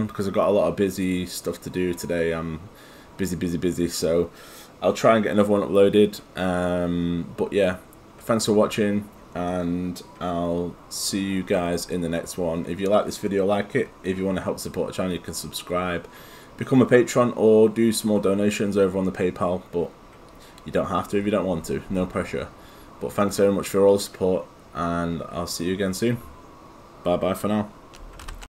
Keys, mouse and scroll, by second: 28.2 alt+F9.